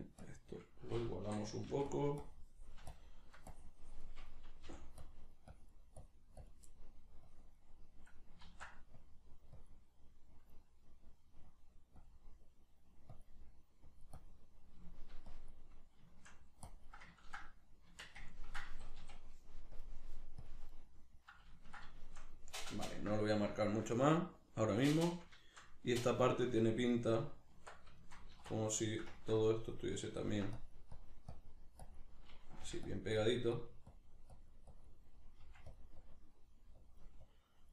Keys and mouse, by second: 1.2 i, 2.9-6.7 shift+drag, 4.7 g, 6.7 middle click, 7.3-10.0 drag, 8.5 ctrl+z, 10.0-11.5 middle drag, 11.5 click, 12.4 middle click, 13.2 click, 13.4 middle click, 13.9 click, 14.6 shift+middle click, 15.3 click, 15.8 middle click, 16.7 click, 17.2-19.8 ctrl+middle drag, 17.9 Tab, 18.7 a, 19.8-20.8 drag, 20.8-27.2 middle drag, 27.2 right click, 27.6 Tab, 28.0-29.5 shift+middle drag, 28.4 alt+q, 29.5 click, 30.2 ctrl+middle click, 30.6-33.0 drag, 32.6 f, 35.4 click, 35.4 f.